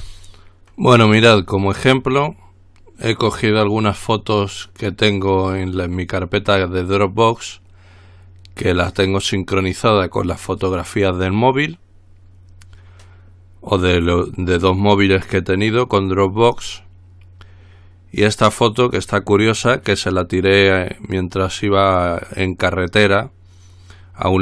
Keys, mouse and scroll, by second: 0.0 ctrl+r.